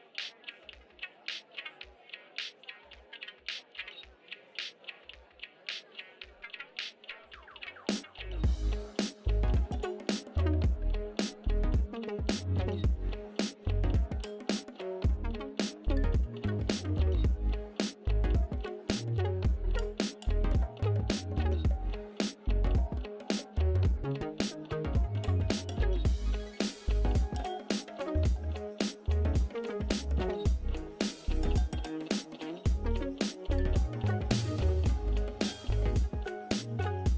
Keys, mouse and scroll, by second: 6.2 click, 7.0 click, 8.2 click, 12.5 click, 14.1 click, 16.1 click, 19.5 x, 21.3 click, 21.5 x, 23.2 ctrl+BackSpace, 25.3 click, 27.7 ctrl+i, 28.9 ctrl+z, 29.8 ctrl+u, 33.2 click, 35.5 click, 36.4 click.